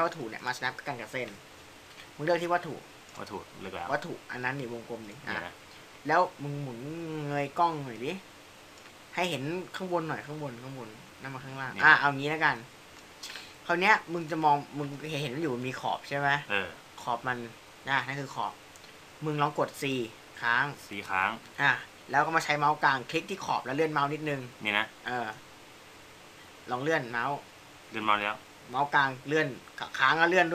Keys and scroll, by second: 20.9 c.